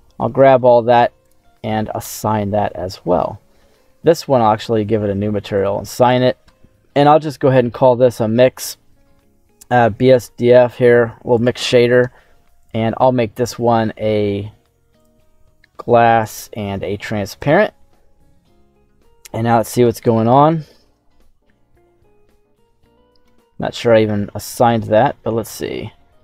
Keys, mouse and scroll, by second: 1.1 click, 2.3-2.7 scroll down 2, 2.7-3.7 middle drag, 4.5 click, 5.4 click, 5.9 click, 7.1-11.4 drag, 12.5-15.0 drag, 16.1-17.4 drag, 18.2 middle click, 19.1 z, 19.8 middle click, 20.4-20.8 scroll up 2, 20.8 Tab, 21.0-22.8 middle drag, 23.2 Tab, 24.3 click, 24.8 Tab, 25.4 middle click, 25.4 scroll up 1.